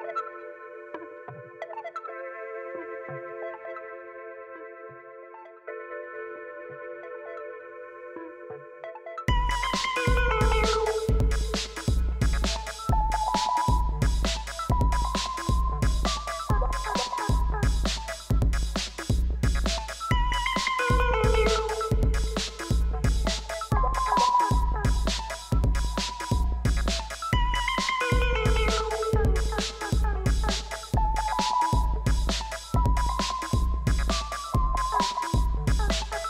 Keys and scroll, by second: 0.4 g, 0.5 z, 1.9 Tab, 2.9 g, 3.1 z, 4.8 shift+g, 4.9 z, 5.8 g, 5.9 z, 7.1-8.3 typing, 8.1 Escape, 9.4 g, 9.4 z, 10.5 shift+z, 10.8 Tab, 21.9 g, 22.0 r, 22.1 e, 22.4 n, 22.4 Return, 27.1-27.9 typing, 34.4 6, 35.1 c, 35.1 2, 35.4 Return.